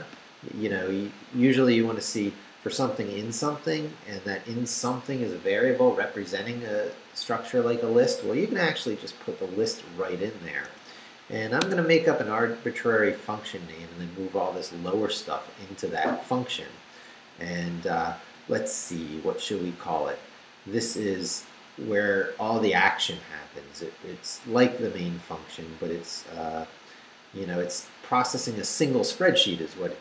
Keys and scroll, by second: 10.7 Return, 11.6 Tab.